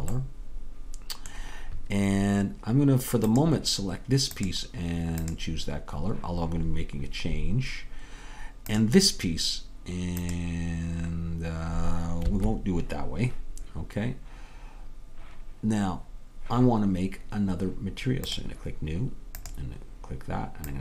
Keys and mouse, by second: 3.9-7.6 drag, 10.3-13.1 drag, 18.4-20.8 drag.